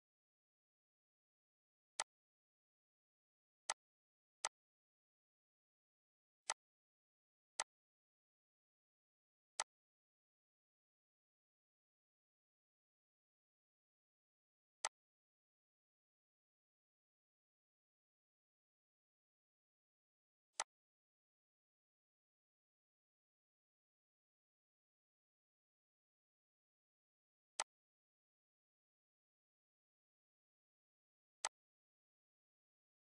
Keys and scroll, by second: 10.4 ctrl+g.